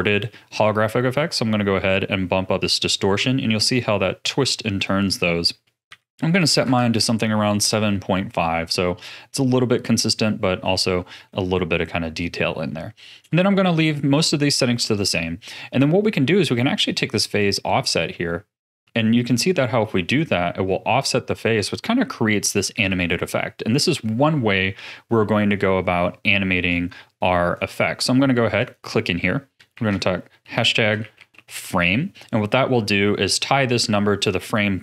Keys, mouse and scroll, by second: 1.8-4.8 drag, 5.0-7.8 drag, 7.8-15.1 middle drag, 17.4-20.4 drag, 22.8 ctrl+z, 26.7-31.8 drag.